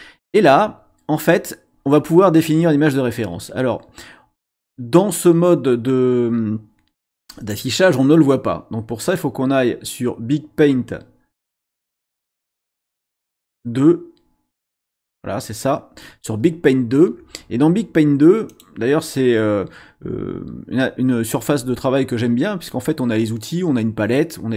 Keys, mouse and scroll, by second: 9.0 click, 11.6 click, 14.7 click, 18.5 click.